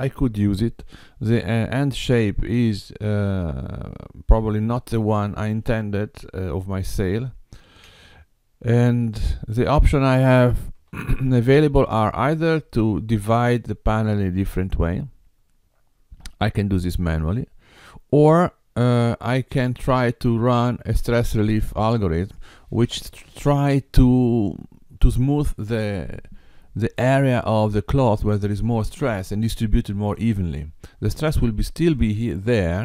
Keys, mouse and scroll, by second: 5.5 Tab, 6.9 x, 9.1 click, 10.8 KP_7, 12.9 Tab, 32.0 click.